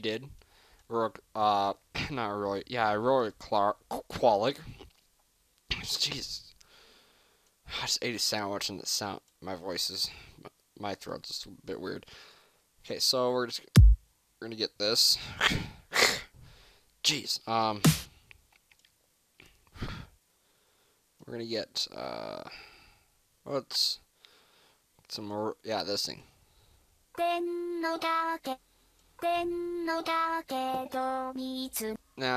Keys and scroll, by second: 1.1 e, 1.6 F5, 1.7 F6.